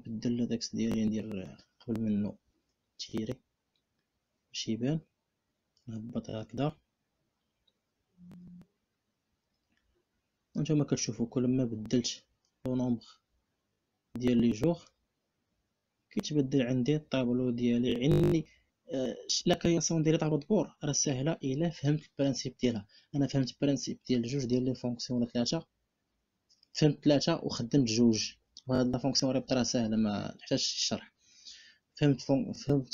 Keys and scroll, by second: 1.7 6, 2.7 Return.